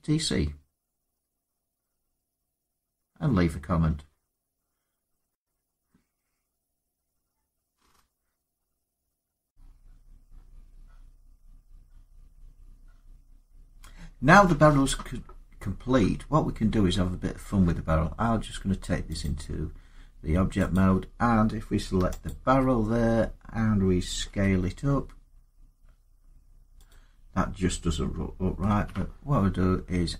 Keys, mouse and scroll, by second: 9.4 click, 15.7 middle click, 15.8 middle click, 16.3 middle click, 16.4 middle click, 17.1 scroll down 2, 19.0 click, 20.5 click, 22.0 alt+click, 22.8 middle click, 22.9 middle click, 24.1 s, 26.7 click, 28.5 ctrl+z.